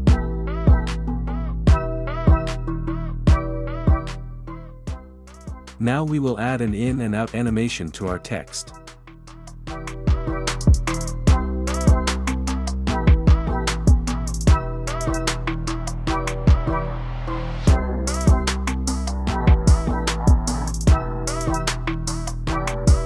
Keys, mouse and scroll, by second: 1.7-3.5 drag, 4.4 click, 5.9-6.9 drag, 8.2 click, 11.6-12.6 drag, 12.6 space, 14.8 space, 15.6-17.1 drag, 17.6-18.8 drag, 18.8 space, 20.1 space, 20.9-21.9 drag, 22.9 click.